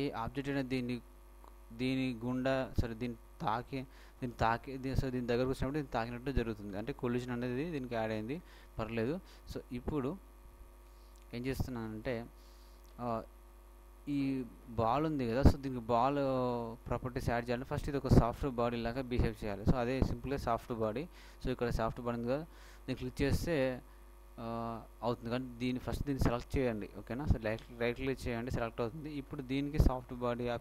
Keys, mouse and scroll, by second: 8.4 middle click, 12.4-14.1 shift+middle drag, 14.3-16.6 middle drag, 28.3-30.2 right drag.